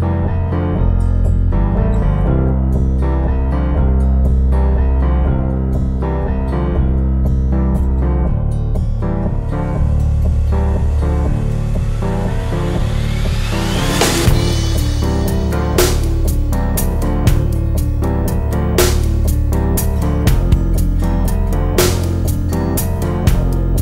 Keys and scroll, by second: 2.2 super+z.